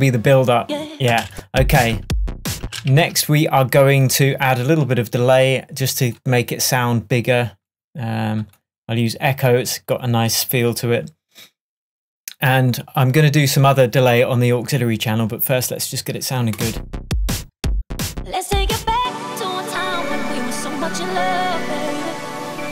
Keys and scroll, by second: 1.1 space, 2.7 space, 2.9 super+s.